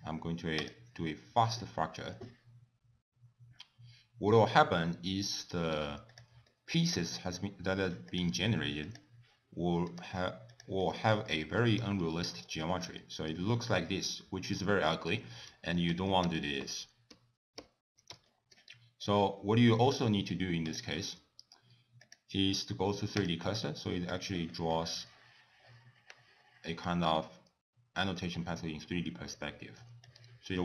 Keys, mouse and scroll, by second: 6.1 click, 6.5 middle click, 7.3 middle click, 8.1 click, 8.9 click, 9.9 click, 10.5 click, 10.9 middle click, 11.3 shift+middle click, 11.9 g, 13.0 middle click, 16.0 ctrl+z, 16.3 ctrl+z, 16.7 ctrl+z, 17.2 ctrl+z, 17.7 ctrl+z, 18.3 shift+middle click, 18.7 middle click, 20.7 click, 22.0 click, 23.7 middle click, 24.2 click, 27.2 middle click, 28.4 scroll down 2, 29.4 middle click, 30.1 click.